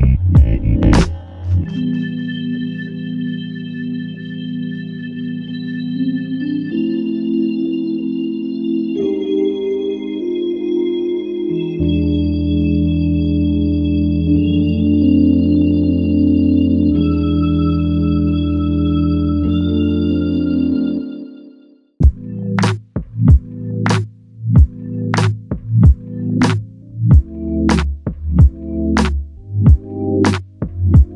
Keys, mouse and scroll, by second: 5.8 typing, 5.8 alt+click, 8.3 double click, 10.4 alt+click, 12.7 double click, 17.3 click, 17.4 alt+click, 21.3 double click, 23.2 shift+click, 24.6 shift+click, 25.2 alt+click, 28.0 double click, 28.7 alt+click, 29.9 double click.